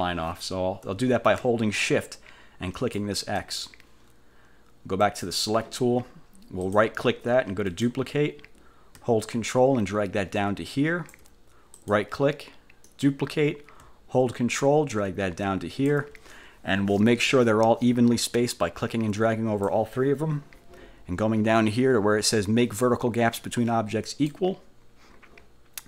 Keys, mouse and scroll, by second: 2.9 shift+click, 5.2 click, 6.8 click, 7.8 click, 9.4-11.4 ctrl+drag, 11.9 click, 13.0 click, 14.7-16.2 ctrl+drag, 18.6-20.0 drag, 24.2 click.